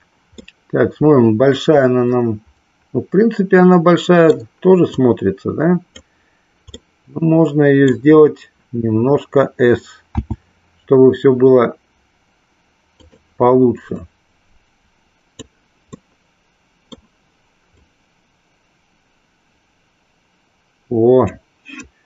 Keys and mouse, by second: 0.5-4.3 middle drag, 4.8-6.0 drag, 6.7-8.0 middle drag, 13.0 click, 14.0-15.5 drag, 16.0-17.0 middle drag, 17.8-21.3 drag.